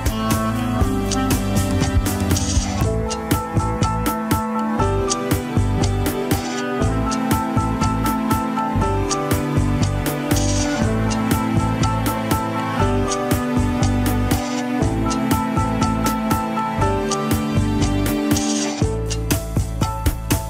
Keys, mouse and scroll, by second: 0.3 KP_7, 1.2 scroll up 1, 1.4 shift+middle click, 1.8 shift+click, 2.5 g, 3.5 click, 3.8 shift+click, 4.3 KP_1, 4.7 r, 12.0 scroll down 1, 12.3 KP_7, 12.4 scroll up 3, 14.6 shift+click, 15.0 g, 16.4 click, 16.7 shift+click, 17.6 s.